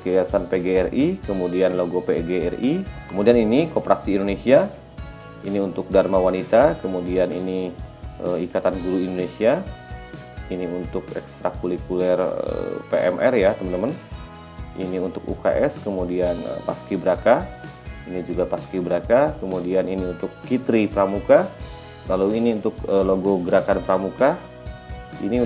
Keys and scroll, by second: 21.6 e.